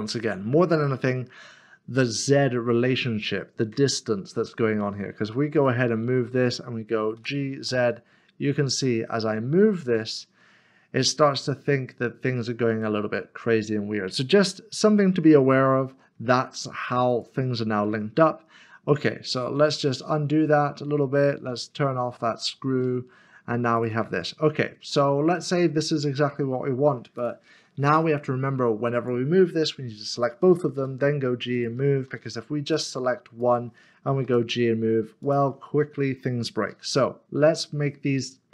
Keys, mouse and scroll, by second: 5.6 click, 7.2 g, 17.1 g, 21.7 ctrl+z, 24.2-24.9 scroll down 1, 24.9 middle click, 26.0-27.2 scroll down 1, 31.5 click, 32.1 ctrl+z, 32.7 click, 34.2 g, 35.2 click, 36.0 middle click, 36.7 ctrl+z, 37.2-38.5 scroll up 1.